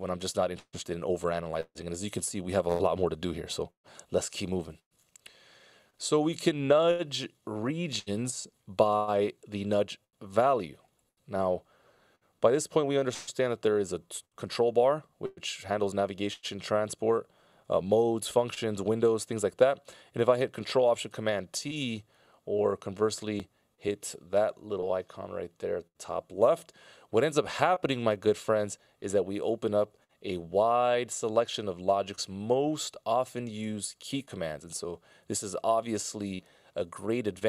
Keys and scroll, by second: 4.4 super+s, 21.6 ctrl+alt+super+t, 29.9 ctrl+alt+super+m.